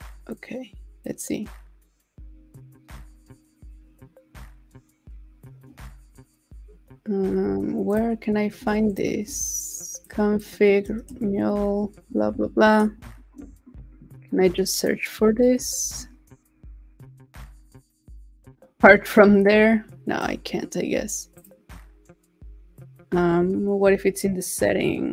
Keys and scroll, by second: 11.2 shift+super+Right, 13.2 super+c, 15.6 super+v.